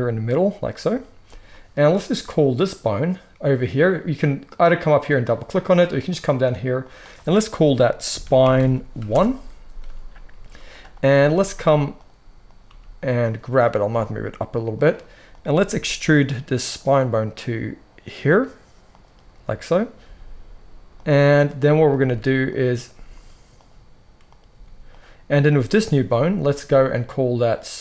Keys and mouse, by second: 6.0 click, 6.1 middle click, 6.8-11.9 drag, 11.0 g, 11.9-12.3 middle drag, 12.3 click, 12.4-15.2 middle drag, 12.6 g, 13.8 g, 15.2 click, 15.6 e, 19.9 g, 21.3 click, 21.9 click, 22.9 g, 24.4 g, 27.5-27.8 drag.